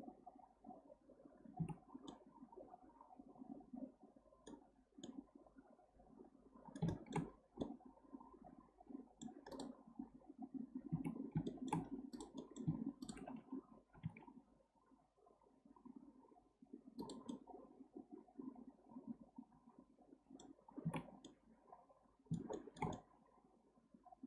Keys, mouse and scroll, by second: 1.6 Tab, 2.1-4.7 middle drag, 4.7-5.0 scroll down 1, 5.0-7.2 middle drag, 7.2-7.6 scroll up 6, 7.6-9.5 middle drag, 9.5 click, 11.0 Tab, 11.5-12.1 shift+middle drag, 12.1 click, 12.4-13.0 middle drag, 13.0 shift+drag, 13.9 g, 17.3 middle click, 17.5-18.8 middle drag, 19.6 middle click, 19.7 middle click, 20.6-20.9 scroll down 3, 20.9 Tab, 21.2-24.2 middle drag.